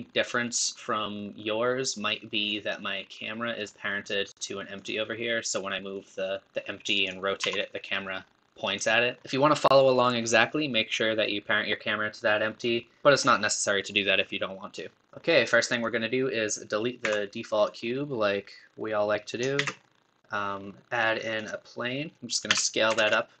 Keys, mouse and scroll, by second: 4.8 click, 15.8-20.3 drag, 21.9 middle click.